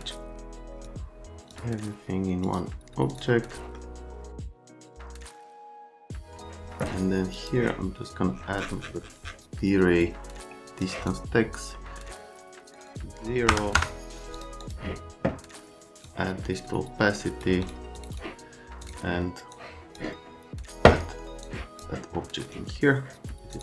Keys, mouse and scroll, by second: 0.8 click, 1.2 middle click, 1.5 click, 2.3 click, 2.6 right click, 2.9 click, 3.3 click, 3.4 right click, 3.6 click, 3.8 middle click, 4.4 click, 4.6 right click, 5.1 click, 5.4 click, 5.8 middle click, 6.1 click, 7.3 click, 10.8 click, 11.7 right click, 12.7 click, 13.5 KP_0, 13.7 KP_Enter, 14.3 click, 14.6 click, 16.0 click, 17.6 click, 18.0 click, 18.1 click, 18.8 click, 19.5 click, 21.4 click, 22.4 right click, 22.5 click, 23.5 click.